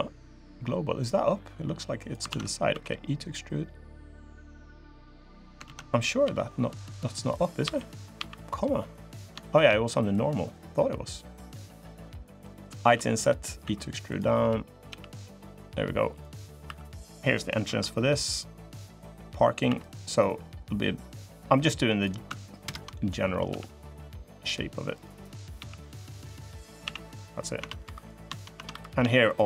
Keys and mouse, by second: 0.8-1.9 drag, 2.0 ctrl+z, 2.5 e, 4.5 click, 5.4 ctrl+z, 6.0 ., 7.4 ,, 7.9 ,, 9.2 shift+click, 9.9-12.2 drag, 13.4 i, 13.4 e, 14.6 g, 16.4 3, 17.4 i, 18.9 click, 19.4 e, 20.4-21.8 drag, 22.4 ctrl+KP_Add, 23.2 g, 25.3 g, 26.6 a, 27.0 click, 27.3 Tab, 27.6 3, 28.3 Tab, 28.5 3.